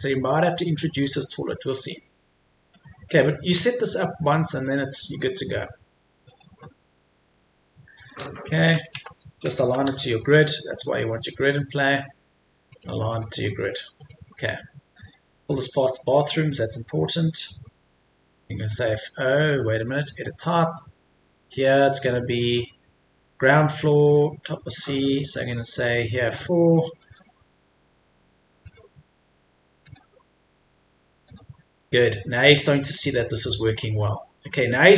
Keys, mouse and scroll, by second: 2.7 click, 3.3 middle click, 4.5 click, 5.3 middle click, 6.3 click, 6.8-7.3 scroll up 1, 7.3 Escape, 7.9-9.0 drag, 8.5 Left, 8.7 Left, 8.9 Left, 10.2 click, 11.1-11.9 scroll down 1, 11.9 click, 14.2 Escape, 15.5 click, 17.5 Escape, 18.6 click, 32.9-34.0 middle drag.